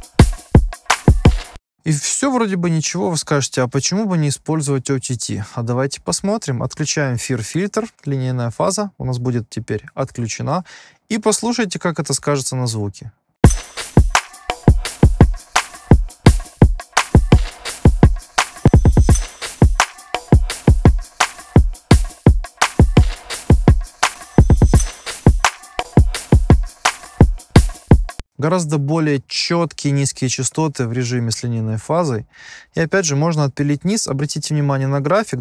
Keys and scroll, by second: 1.5 space, 13.4 space, 28.1 space.